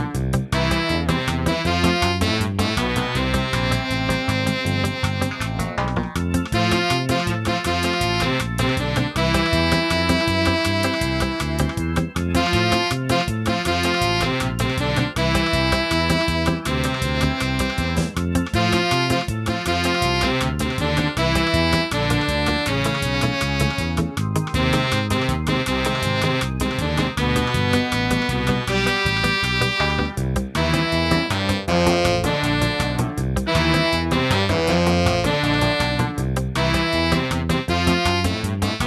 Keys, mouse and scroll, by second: 3.7 middle click, 4.8-6.8 scroll up 4, 10.9 click, 11.1 click, 11.1 click, 18.3 click, 18.7 click, 20.0 middle click, 22.7 middle click, 22.8 scroll down 2, 23.7 g, 27.7 ctrl+z, 28.7 g, 37.9 middle click.